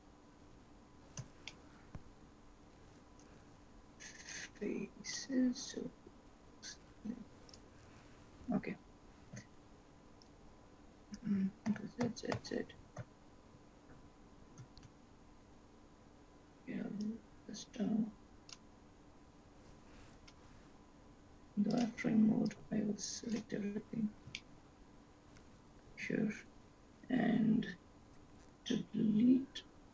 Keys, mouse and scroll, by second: 1.8 shift+middle click, 4.4 click, 6.4 x, 9.5 z, 11.6 ctrl+z, 11.9 ctrl+z, 12.2 ctrl+z, 13.3 ctrl+z, 14.1 ctrl+z, 15.0 ctrl+z, 16.4-17.1 scroll down 6, 17.6 click, 17.6 scroll down 2, 18.8-19.3 scroll up 5, 20.2 click, 21.9 click, 22.6 click, 24.6 shift+middle click, 25.4-25.7 scroll up 2.